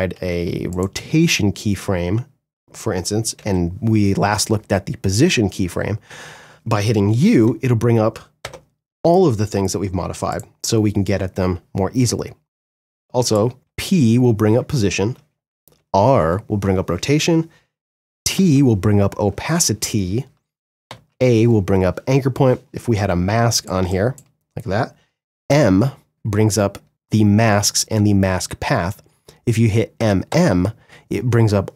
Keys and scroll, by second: 2.6 p, 13.5 p, 24.6 m, 29.1 m.